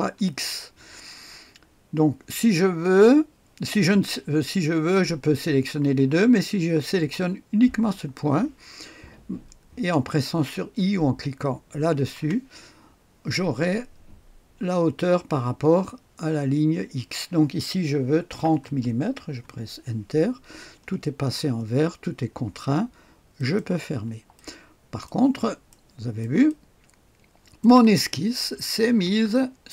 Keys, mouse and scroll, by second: 12.1 i, 18.2 KP_3, 18.6 KP_0, 19.2 Return, 20.3-23.0 scroll up 1, 23.3 click, 24.3 click, 25.4 click, 25.6 middle click, 26.2 right click, 26.4-27.6 middle drag, 27.6 click, 28.5-29.4 typing.